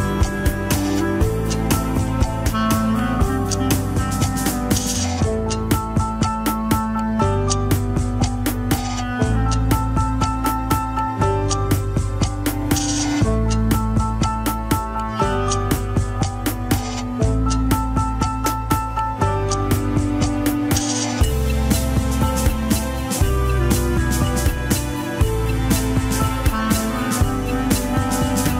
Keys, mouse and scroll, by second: 2.8 Tab, 3.4 KP_1, 3.7 alt+z, 3.9-4.3 scroll up 2, 4.3 click, 6.1 ctrl+l, 6.8 shift+middle click, 7.3 shift+click, 8.1 ctrl+l, 8.5 scroll down 1, 9.0 c, 10.9 ctrl+z, 11.7 c, 12.9 middle click, 13.2 alt+z, 13.9 click, 15.4 middle click, 15.9 alt+z, 16.3 click, 16.6 alt+z, 16.7 middle click, 17.4 click, 19.3 middle click, 20.0 alt+z, 20.4-22.3 middle drag, 22.3 click, 22.6 alt+z, 22.7 middle click, 23.3 click, 24.0-25.1 middle drag, 25.1 click, 26.8 KP_1, 27.0 scroll down 4, 27.2 ctrl+Tab, 28.2-28.5 scroll down 3.